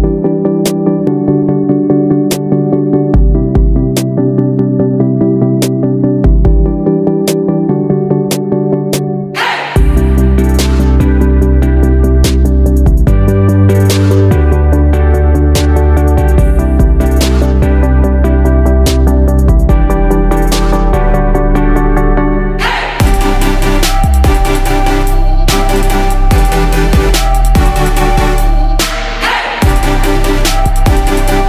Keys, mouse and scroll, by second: 14.2 ctrl+d, 15.6 click, 18.9-21.2 drag, 22.2 shift+click, 25.3 ctrl+g, 26.2 click.